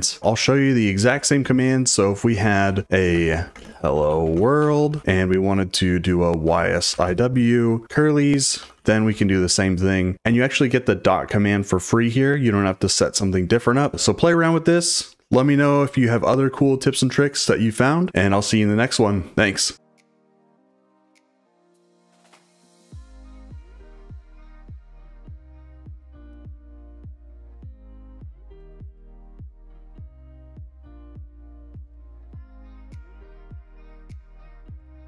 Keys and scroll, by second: 0.2-4.6 typing, 3.1 Return, 5.0 Escape, 6.2-9.1 typing, 13.9 typing, 15.9 typing.